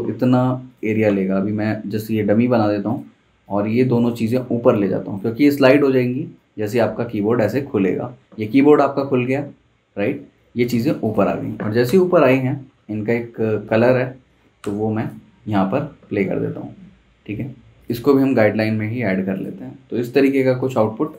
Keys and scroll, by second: 1.3 super+c, 2.1 super+f, 11.9 i, 13.3 v, 14.6 i.